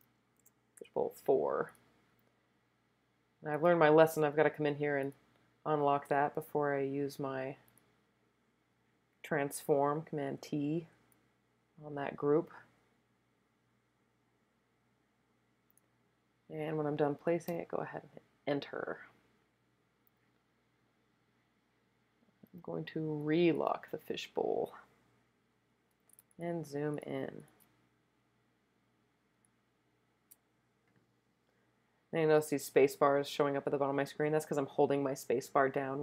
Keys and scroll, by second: 0.8 4, 10.4 super+t, 17.5 Return, 26.3 super+space, 26.7 super+space, 26.8 super+space, 27.6 space, 29.3-30.1 typing.